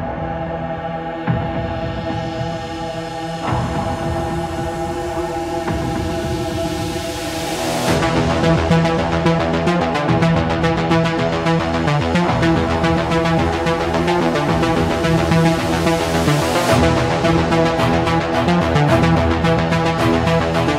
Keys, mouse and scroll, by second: 0.6 click, 2.2 ctrl+click, 4.1 click, 5.0 click, 5.8 Escape, 8.0-9.1 drag, 10.1-11.2 drag, 12.4-13.4 drag, 13.7 click, 14.8 click, 15.3-17.2 typing.